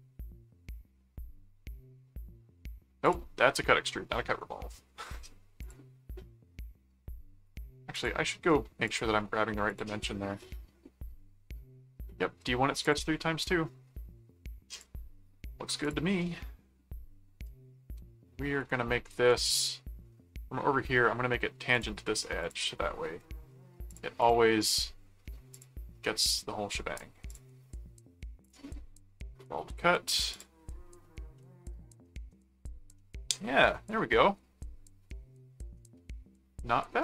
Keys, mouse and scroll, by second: 3.0 click, 3.8 middle click, 5.6 click, 7.5 right click, 7.9 click, 8.9 click, 9.6 click, 12.8 click, 14.7 click, 15.8 click, 19.3 ctrl+4, 21.7 ctrl+click, 22.4 ctrl+click, 23.9 click, 25.5 click, 27.2 click, 28.4 click, 30.3 click, 31.3 middle click, 33.0-37.0 middle drag.